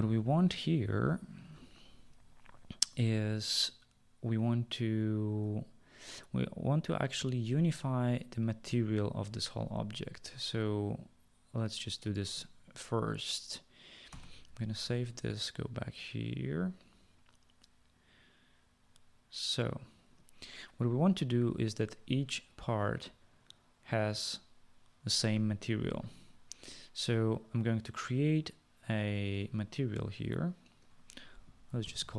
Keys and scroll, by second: 14.2 ctrl+s, 31.5-32.1 typing.